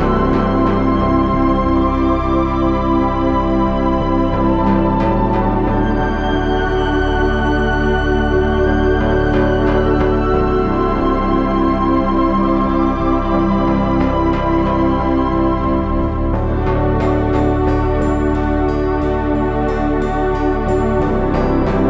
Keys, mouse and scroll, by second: 5.4 middle click, 7.4 g, 8.7 c, 9.9 g, 10.9 Tab, 11.3 z, 20.8 KP_7.